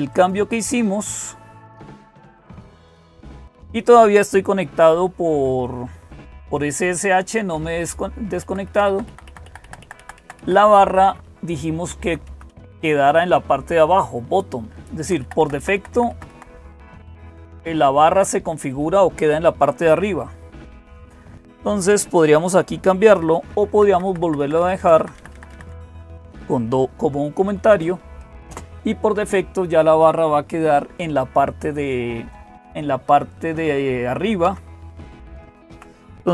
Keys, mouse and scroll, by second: 0.0-36.3 typing, 0.1 click, 2.1 click, 8.3 Left, 8.5 Left, 8.7 Left, 8.9 Left, 9.1 Left, 9.5 Left, 9.6 Left, 9.8 Left, 10.0 Left, 10.2 Left, 10.6 Right, 10.8 Right, 11.1 Right, 11.7 Right, 11.8-12.3 Right, 14.8 Left, 15.0 Left, 15.2 Left, 15.4 Left, 15.6 Left, 15.9 Left, 16.1 Left, 17.0 Right, 17.7 Right, 17.8 Right, 17.9 Right, 18.0 Right, 20.8 Left, 23.7 Left, 23.9 Left, 24.0 Left, 24.2 Left, 24.6 Left, 24.8 Left, 25.0 Left, 25.1 Left, 25.3 Left, 25.5 Left, 34.3 Down, 35.1 Up, 35.5 Down.